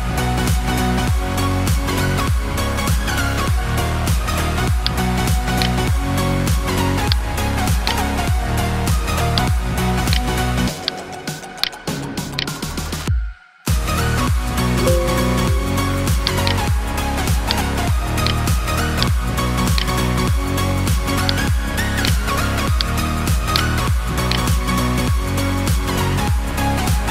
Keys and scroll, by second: 14.0 Delete.